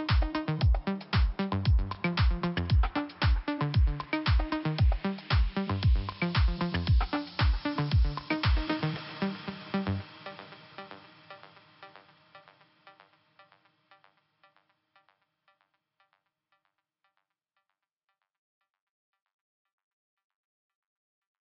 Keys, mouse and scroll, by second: 0.8 click, 4.7 click, 4.7 click, 5.5 click, 7.1 click, 7.2 click, 7.8 click, 10.0 click, 12.0 click, 13.1 scroll down 2, 14.3 click, 20.7 click, 20.8 click.